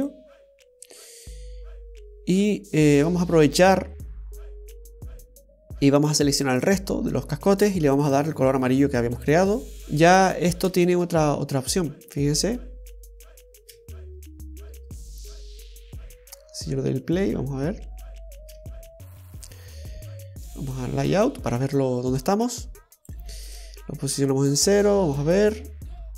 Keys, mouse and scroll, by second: 6.8 right click, 8.2 click, 9.8 scroll up 2, 11.1 space, 13.9 space, 14.8 space, 18.5 space, 19.7-20.9 scroll down 1, 20.9 click, 22.4 click, 23.7 space, 25.9 middle click, 25.9 scroll up 2.